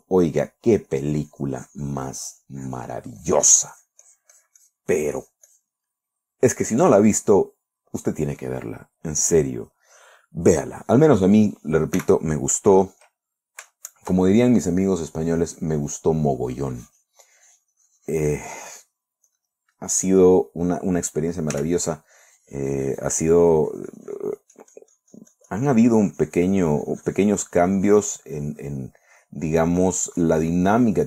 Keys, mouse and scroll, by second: 0.5 shift+middle click, 1.3-6.3 drag, 6.4-7.0 middle drag, 7.4 middle click, 12.5 s, 13.3 click, 14.1-15.2 shift+drag, 15.6-19.1 drag, 19.7 click, 20.5 click, 22.0 f, 22.3 click, 22.7-28.6 drag, 28.8-31.0 drag.